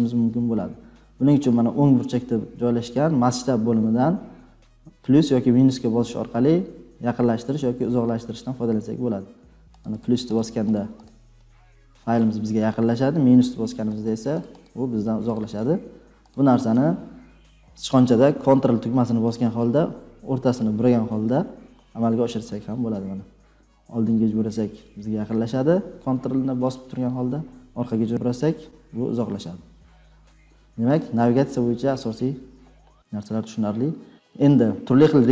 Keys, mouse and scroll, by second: 1.2 click, 11.4 click, 12.1-14.9 click, 14.0-14.8 scroll down 5, 15.3 click, 16.3 click, 16.7 click, 20.2 ctrl+scroll down 2, 20.3 ctrl+scroll, 20.8 ctrl+scroll, 21.6 ctrl+scroll, 22.4 ctrl+scroll, 27.2-27.9 ctrl+scroll, 30.0 ctrl+scroll down 3, 31.0 click.